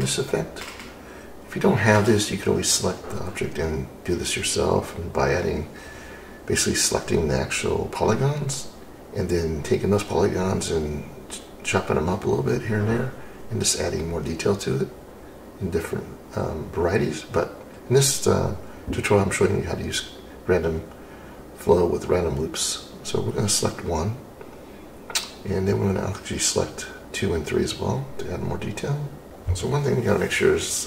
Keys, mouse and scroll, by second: 0.5 shift+click, 4.2 ctrl+z, 6.1 shift+q.